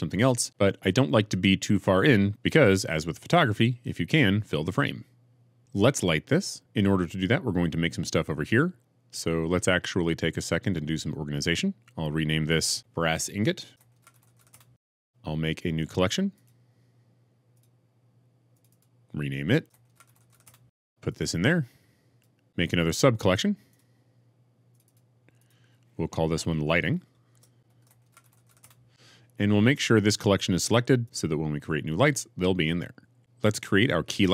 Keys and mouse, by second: 12.7 F2, 16.4-17.5 drag, 18.5 click, 20.0 s, 20.5 click, 21.2 click, 21.3 click, 23.7-28.6 drag.